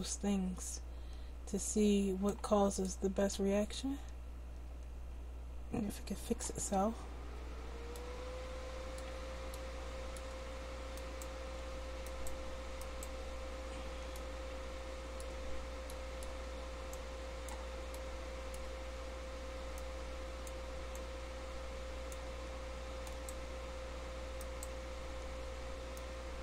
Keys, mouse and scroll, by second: 2.8-4.7 drag, 4.7-14.6 middle drag, 16.9-18.0 drag, 18.2 click, 23.0-25.9 right drag.